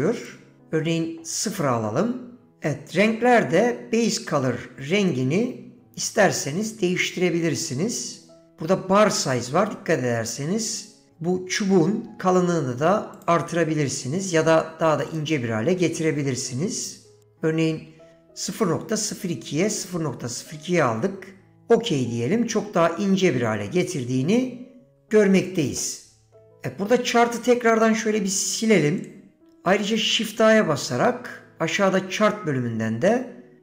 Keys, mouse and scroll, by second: 27.8-29.1 right drag, 30.1 shift+a.